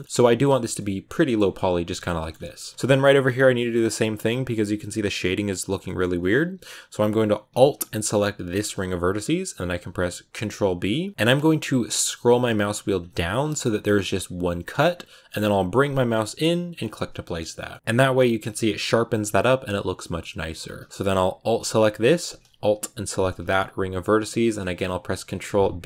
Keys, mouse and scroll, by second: 0.0 scroll down 2, 0.1 shift+middle click, 0.5 a, 0.6 middle click, 1.3 a, 1.8 shift+middle click, 2.2-3.9 scroll up 5, 2.4 shift+middle click, 2.7 shift+middle click, 3.9 Tab, 5.7 middle click, 5.9 Tab, 8.4-10.3 alt+right drag, 10.3 ctrl+b, 17.6 middle click, 17.7-19.9 scroll up 1, 19.9 middle click, 20.4 Tab, 22.9-24.5 alt+right drag, 24.5 ctrl+b.